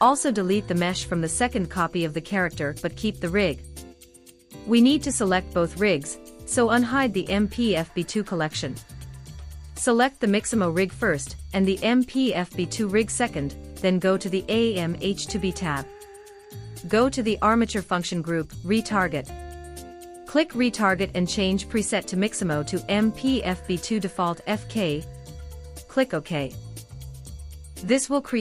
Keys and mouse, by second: 0.8 ctrl+i, 2.0 x, 6.8 click, 11.7 shift+click, 14.0 click, 15.8-17.1 middle drag, 21.0-27.5 middle drag.